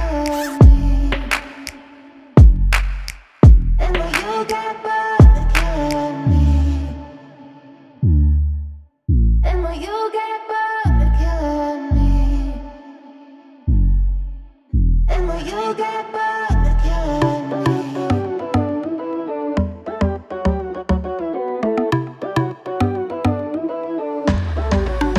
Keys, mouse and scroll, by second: 1.4 click, 1.9 scroll up 1, 2.2-2.7 scroll down 1, 3.0 scroll up 1, 3.0 scroll down 1, 3.5 click, 4.7 ctrl+z, 4.9 right click, 5.5 click, 5.7 double click, 5.9 click, 6.2 double click, 7.4 click, 8.7 scroll up 1, 9.6 scroll down 1, 10.2 click, 12.1 click, 12.9 click, 13.9 click, 14.3-14.8 scroll down 1, 18.3 click, 20.6 click, 21.7 click, 22.4 click, 23.0 click, 24.3 click.